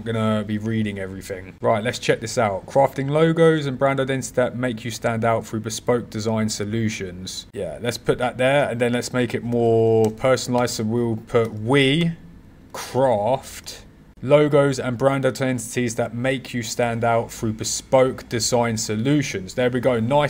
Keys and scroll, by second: 7.5 super+c, 8.5 super+v, 11.4 w.